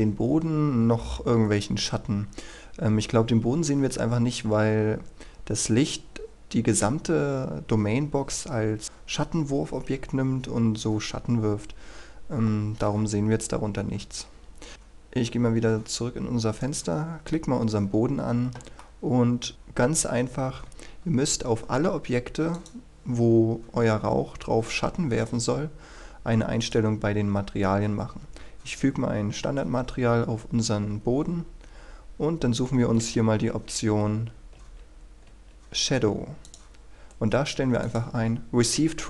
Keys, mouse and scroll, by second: 14.7 Escape, 16.6 right click, 18.8 middle click, 19.5-20.8 scroll up 1, 22.6 click, 25.8-26.6 scroll up 1, 26.6-27.7 drag, 31.5-33.4 scroll down 1, 33.4 typing, 35.3-35.7 typing, 36.4 click.